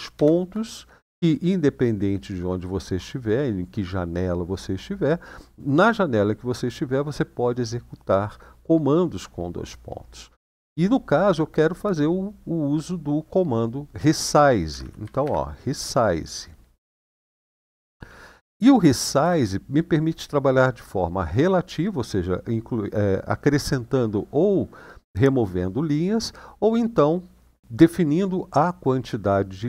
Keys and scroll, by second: 14.5-15.0 typing, 16.6-17.0 typing, 19.0 typing.